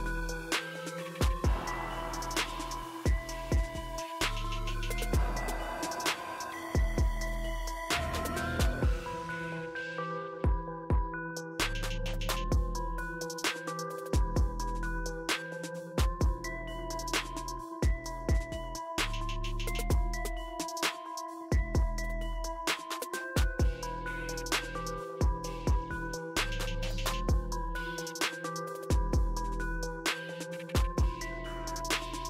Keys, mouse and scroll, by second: 0.4-0.8 typing, 0.8-2.9 drag, 7.4 ctrl+j, 8.5-9.6 drag, 11.1 click, 11.1 typing, 12.3 click, 12.3 typing, 12.8-13.1 scroll down 1, 14.3 shift+click, 15.5 right click, 17.7-23.0 drag, 27.8-28.3 drag, 30.2 click.